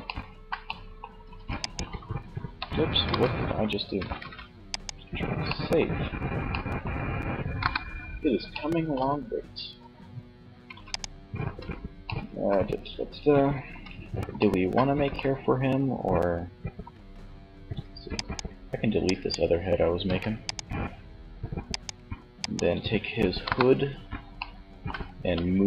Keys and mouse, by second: 0.5 ctrl+a, 2.1 ctrl+z, 3.3 ctrl+s, 6.6 KP_1, 9.8 ctrl+s, 10.6 z, 12.7 z, 17.3 click, 18.2 middle click, 19.1 right click, 19.1 x, 22.4 KP_1, 24.6 m.